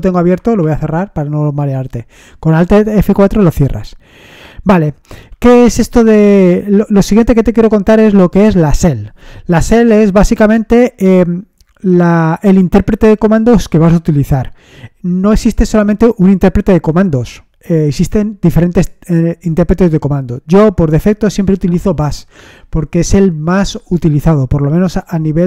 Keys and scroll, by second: 0.6 alt+F4.